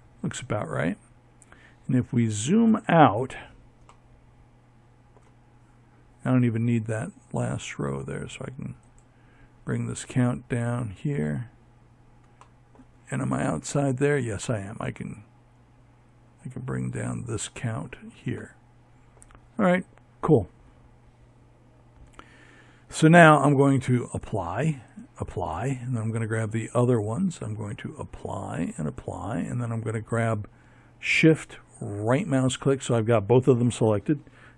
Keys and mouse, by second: 0.0-2.8 middle drag, 7.6-10.3 drag, 15.3-16.8 drag, 22.1-24.6 drag, 24.6-26.2 right drag, 26.7-28.6 drag, 30.0-32.0 right drag, 32.7 ctrl+j.